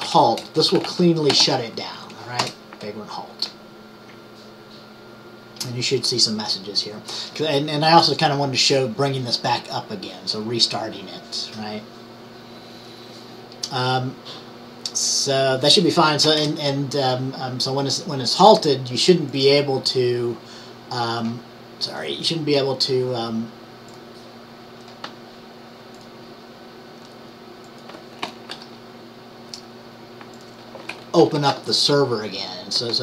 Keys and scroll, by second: 28.6 ctrl+t, 31.1-32.0 typing.